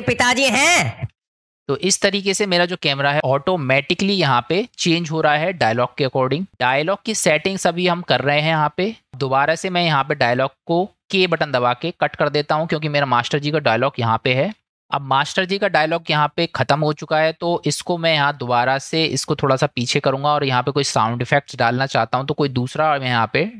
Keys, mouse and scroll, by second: 1.1 space, 3.1 middle click, 11.3 k, 14.6 space, 17.2 middle click, 19.5 click.